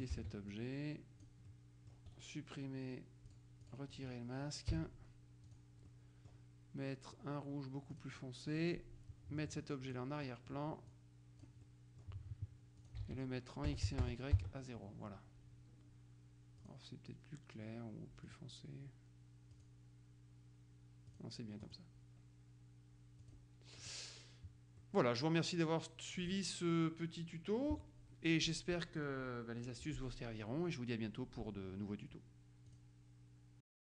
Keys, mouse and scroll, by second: 0.3 ctrl+d, 0.6-1.8 ctrl+drag, 2.2 right click, 3.3-4.5 drag, 4.8 Delete, 5.5 click, 8.0 click, 9.9 click, 11.1 click, 11.8 click, 12.9 ctrl+click, 13.1 ctrl+a, 13.8 KP_0, 14.0 Tab, 14.1 KP_0, 14.5 Tab, 16.7 click, 18.4 click, 19.7 click, 21.2 click, 23.3 click, 23.9 middle click, 24.9-26.9 middle drag, 32.8 click, 33.7 click.